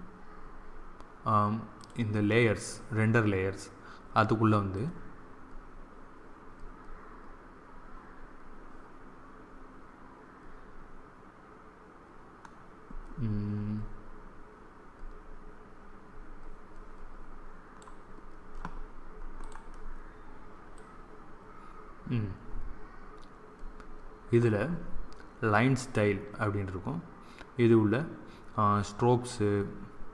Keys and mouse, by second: 1.7-3.5 drag, 4.6-6.5 drag, 19.3-22.4 drag.